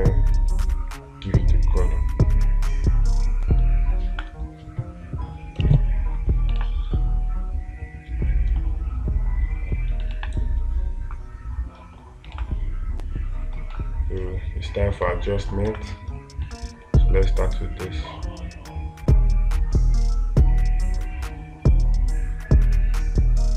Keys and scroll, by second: 7.0 space, 10.6 space, 12.8 space, 15.5 space.